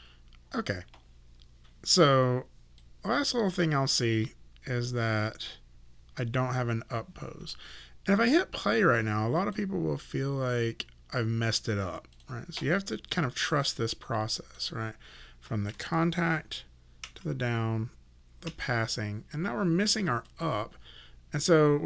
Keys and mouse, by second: 2.8 click, 9.4 click, 12.2 click, 20.3 click.